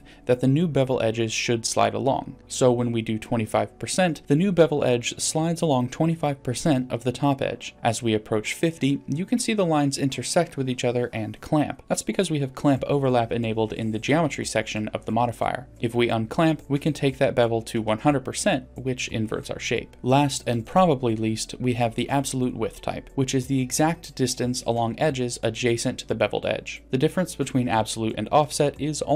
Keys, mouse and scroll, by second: 9.5-11.0 drag, 12.9-14.6 drag, 15.3 click, 15.8-20.2 drag, 21.7-23.1 drag, 24.7 click, 24.9 click, 25.3 click, 25.6 click.